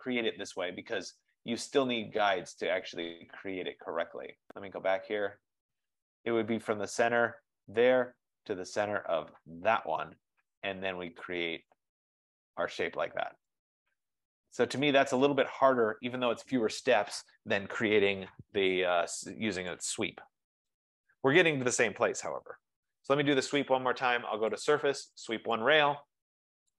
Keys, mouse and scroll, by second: 5.3 click, 7.9 click, 8.9 F15, 9.9 click, 11.8 click, 15.5 right click, 19.8 click, 20.8 click, 21.7-22.7 typing, 24.6 click, 25.6 click.